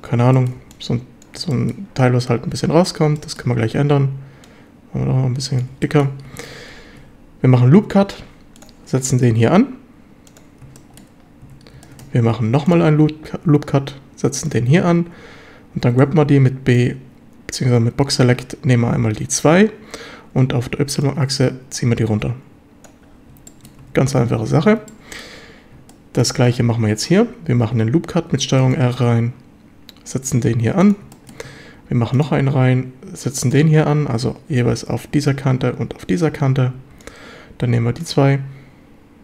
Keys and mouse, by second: 0.4 click, 0.6 b, 1.2 click, 1.5 shift+middle drag, 3.2 shift+middle click, 4.5-5.6 drag, 5.8 shift+middle click, 6.3 a, 6.7 ctrl+r, 10.3 click, 10.8 shift+middle drag, 11.4 a, 11.9-12.9 shift+middle drag, 12.3 ctrl+r, 14.4 click, 14.7 a, 15.8 b, 21.1-22.8 drag, 23.5 shift+middle drag, 23.9 a, 24.9-25.3 shift+drag, 25.9-26.2 shift+drag, 27.5 ctrl+r, 30.8 click, 31.1 shift+middle drag, 31.9 ctrl+r, 33.5 click, 36.3 a, 36.8 b.